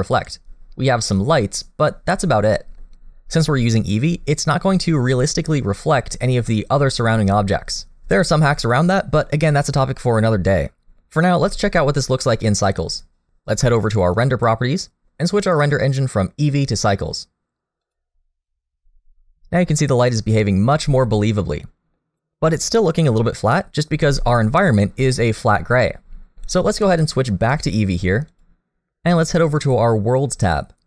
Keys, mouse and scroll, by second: 14.2 click, 15.8 click, 20.0 middle click, 21.4 middle click, 24.2 middle click, 27.5 click, 30.4 click.